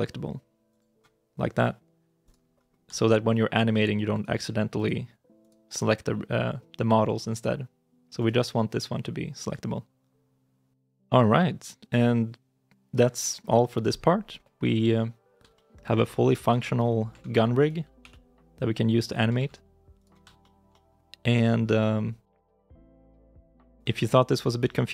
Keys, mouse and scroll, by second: 2.3 right click, 2.8 shift+middle click, 4.0 right click, 8.0 right click, 14.8 middle click, 15.4 shift+middle click, 16.1 middle click, 16.4 shift+middle click, 17.1 ctrl+Tab, 17.4 right click, 17.8 g, 19.2 ctrl+z, 19.8 right click, 20.2 shift+middle click, 22.3 g, 23.8 middle click, 24.3 shift+middle click.